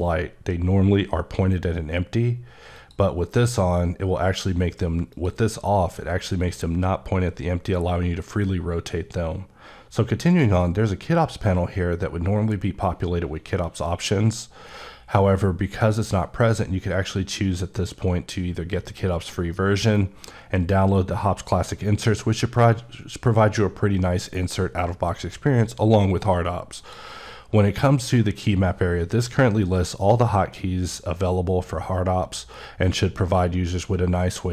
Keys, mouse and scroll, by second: 5.0 click, 10.2 click, 10.7 click, 26.7 click.